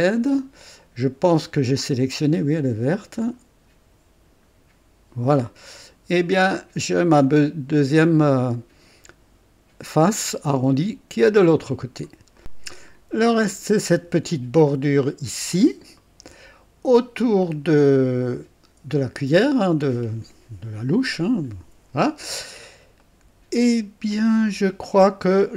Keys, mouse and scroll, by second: 3.2 click, 5.4-12.2 drag, 12.4 click, 12.9 scroll up 2, 13.4 right click, 13.5 click, 16.0 right click, 16.0 click, 17.2-18.2 scroll down 1, 22.5 scroll up 2, 23.0 right click, 25.0 click.